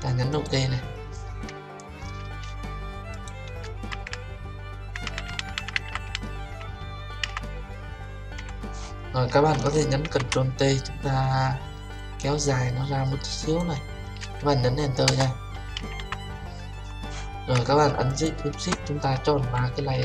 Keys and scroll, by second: 10.0 ctrl+t, 18.0 Return.